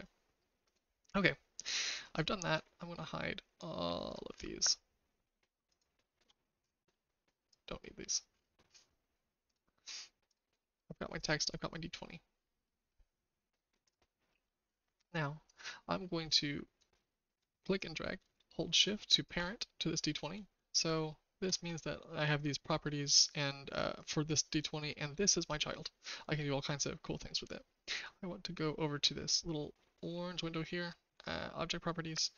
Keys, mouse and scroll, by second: 0.7 click, 4.0 click, 7.5 click, 9.4 click, 10.2 click, 12.6 middle click, 13.8 click, 14.3 middle click, 14.3 typing, 15.5 click, 16.8-19.2 drag, 20.6 shift+middle click, 23.9 click.